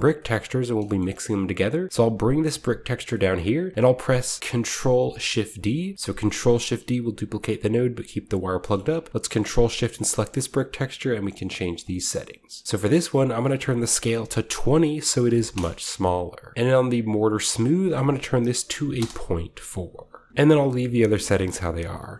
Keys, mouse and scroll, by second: 0.0-1.7 scroll down 1, 0.1-1.9 middle drag, 1.9-4.4 drag, 6.3 shift+d, 8.3 click, 8.7 middle click, 8.7-10.1 scroll up 2, 9.2 ctrl+shift+click, 9.2 ctrl+shift+middle click, 9.5 ctrl+shift+middle click, 9.7 click, 9.9-11.3 drag, 13.4 click, 15.2 typing, 15.5 Return, 17.5-19.1 drag, 18.9 typing, 19.0 Return, 20.3-20.6 middle drag, 20.3-20.6 scroll down 1, 20.6 scroll up 1, 20.8-21.3 middle drag, 20.8-22.1 scroll down 1, 21.5 middle click, 22.0-22.1 middle drag.